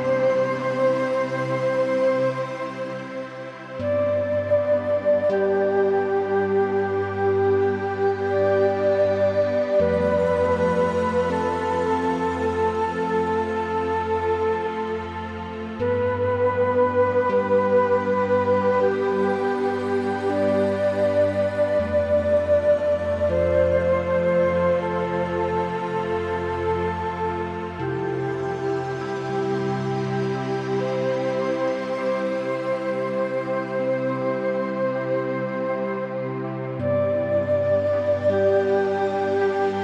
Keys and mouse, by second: 2.5 click, 3.2 g, 4.2 y, 6.5 click, 6.9 click, 7.1 click, 7.9 click, 8.2 g, 10.3 y, 13.4 click, 14.3 g, 19.6 click, 20.3 o, 20.6 g, 21.3 y, 22.9 click, 23.5 g, 25.5 click, 25.9 g, 26.4 click, 27.6 shift+middle click, 27.8 click, 28.5 g, 29.2 click, 29.5 g, 30.6 y, 31.3-32.3 drag, 32.9 click, 33.4 g, 33.6 y, 34.8 click, 35.1 Tab, 35.2 click, 35.5 middle click, 35.9 middle click, 36.8 middle click, 38.2 click, 38.4 click, 38.6 middle click, 39.3 shift+middle click, 39.6 middle click.